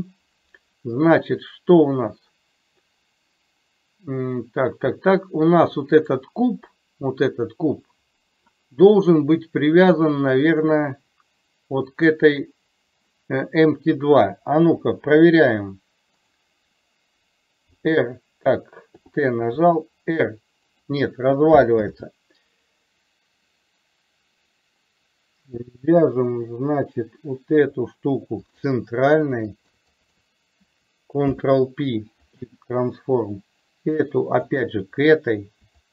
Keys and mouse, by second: 6.0 click, 10.7 click, 14.7 KP_7, 16.3 click, 19.0 t, 19.5 r, 21.9 ctrl+z, 29.6 shift+click, 30.0 click, 31.2 ctrl+p, 34.6 shift+click.